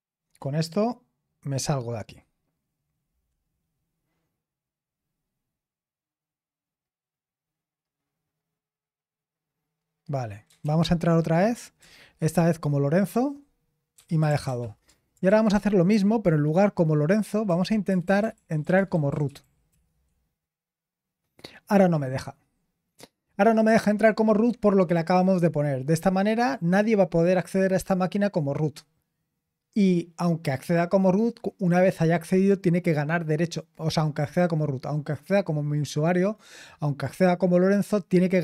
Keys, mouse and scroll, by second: 10.6 ctrl+p, 11.8 Return, 13.7-14.9 typing, 15.3 ctrl+p, 15.9 Left, 16.6-17.5 Left, 17.5 Right, 17.9 BackSpace, 18.0 BackSpace, 18.2-19.2 BackSpace, 19.7 r.